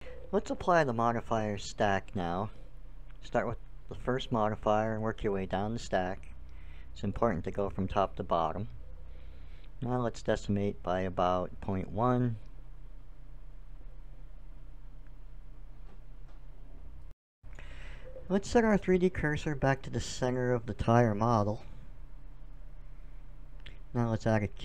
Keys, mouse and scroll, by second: 2.3-5.2 drag, 5.7-11.0 drag, 11.5-13.1 drag, 15.6-17.4 drag, 18.6 shift+s, 21.2 KP_1, 23.5-24.5 middle drag, 24.5-24.6 drag.